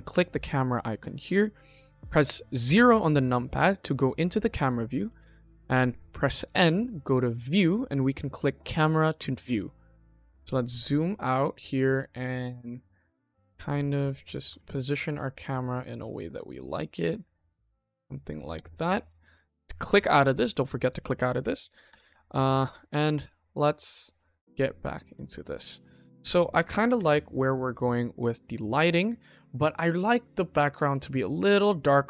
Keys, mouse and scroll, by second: 2.7 KP_0, 4.9 n, 6.6 click, 7.0 click, 8.9 click, 9.6-10.5 scroll down 6, 10.5-11.5 scroll down 7, 11.9-13.1 shift+middle drag, 13.3 middle click, 14.0 ctrl+middle click, 14.5 shift+middle click, 15.0-16.3 ctrl+middle drag, 16.5-17.6 shift+middle drag, 17.7 q, 19.0 click, 21.3 click, 23.8 n, 24.0-24.7 middle drag, 25.0 click, 25.3-25.9 middle drag, 26.9 KP_0, 28.3-29.3 scroll up 2, 29.8 click.